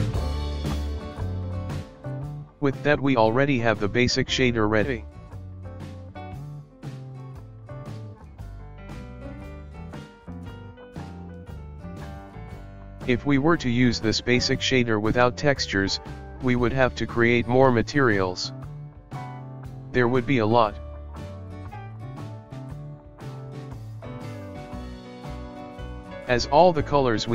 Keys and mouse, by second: 1.3-4.4 drag, 7.2 click, 7.9 click, 8.5 ctrl+shift+middle click, 10.6 middle drag, 10.8 KP_1, 11.4 Right, 11.6 Right, 13.9-17.6 drag, 17.6-19.9 ctrl+middle drag, 20.8-22.6 drag, 22.6-24.6 ctrl+middle drag, 24.6 click, 25.3-27.3 drag.